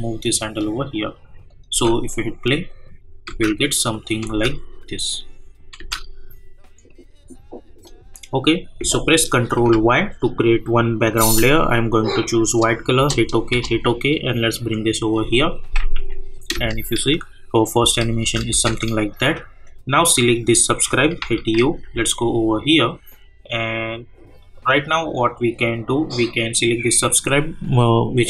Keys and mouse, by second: 0.6 click, 1.7 space, 3.9 click, 4.3 space, 6.8 click, 9.7 ctrl+y, 11.5 click, 13.0 Return, 14.4 click, 16.3 u, 17.1 space, 19.3 click, 21.2-22.3 typing, 24.4 click.